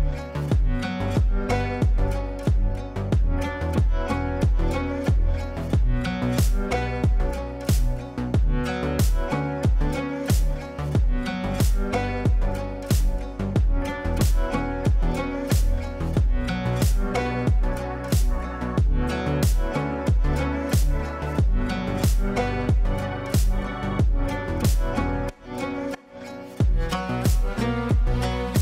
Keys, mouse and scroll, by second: 3.6-6.0 drag, 9.6 Tab, 14.5 click, 17.6 Tab, 21.5 Tab, 24.7 click, 27.5 shift+click, 28.5 l.